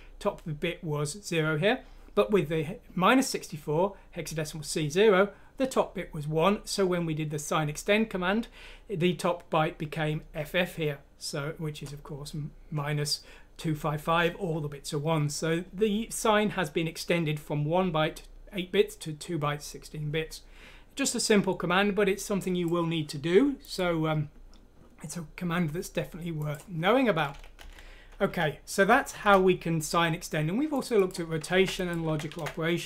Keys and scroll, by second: 27.6 shift+Home.